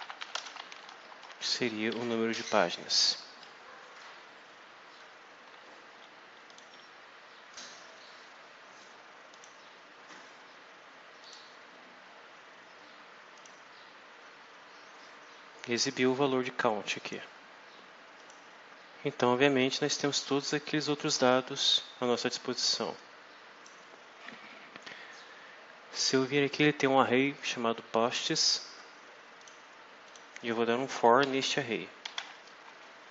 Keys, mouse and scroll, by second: 0.0-1.2 typing, 6.4 click, 7.4 click, 9.2 click, 11.1 click, 13.3 click, 16.0-17.2 drag, 18.1 click, 19.8 alt+Tab, 20.8 alt+click, 22.9 click, 28.5 scroll down 2, 29.3 click, 30.0 click, 31.1 shift+Home, 31.7-33.1 typing.